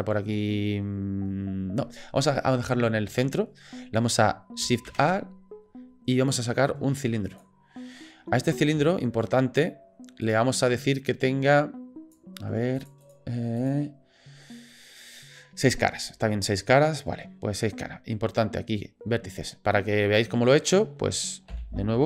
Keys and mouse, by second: 2.4-2.7 shift+middle drag, 4.9 shift+a, 8.9-9.2 shift+drag, 10.3 click, 11.2 click, 12.8 click, 13.0 click, 13.6 click, 20.0 click, 20.6 click, 21.5 Delete.